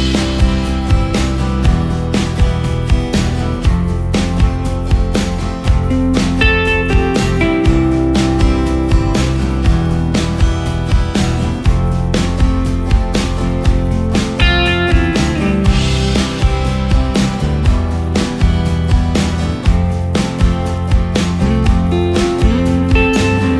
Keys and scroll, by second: 1.8 ctrl+space, 10.8 ctrl+shift+space.